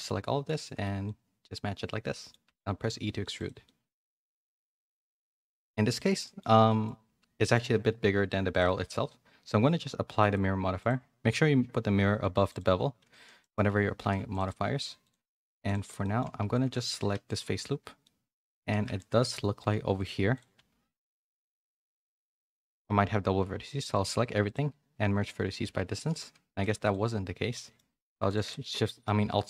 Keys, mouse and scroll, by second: 0.0 middle click, 0.6 shift+middle click, 1.0-2.3 middle drag, 3.6 middle click, 4.3 Tab, 4.5 a, 4.7 a, 4.8 middle click, 6.2 middle click, 6.6 middle click, 7.4 middle click, 8.5 click, 9.6 click, 10.7 click, 12.4 click, 13.0 ctrl+a, 13.4 middle click, 13.7 Tab, 14.0 3, 15.0 alt+click, 15.6 alt+click, 16.0 middle click, 16.3 a, 16.6 a, 16.8 3, 18.0 middle click, 18.6 1, 18.9 shift+middle click, 20.0 click, 20.5 g, 22.2 1, 22.4 a, 23.6-25.6 right drag, 25.9 shift+n, 26.5 3, 26.8 alt+click, 27.5 middle click, 28.2 alt+shift+click, 28.7 middle click.